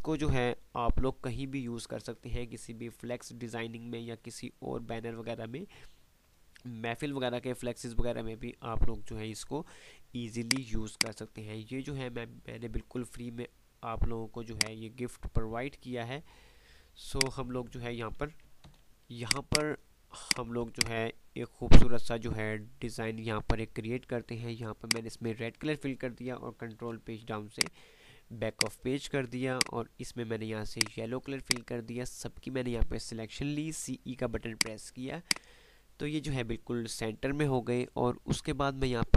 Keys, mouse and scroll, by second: 0.0 typing, 10.6 click, 11.3 click, 11.6 F3, 13.1 F2, 14.7-16.3 drag, 16.4 F2, 17.3 click, 17.6-18.0 F2, 18.7 F10, 19.0-23.4 ctrl+drag, 26.9 ctrl+shift+Page_Down, 27.7-32.6 ctrl+drag, 34.0 ctrl+e, 34.7 ctrl+click, 35.0 ctrl+F2, 35.6 ctrl+click, 35.7 ctrl+F2.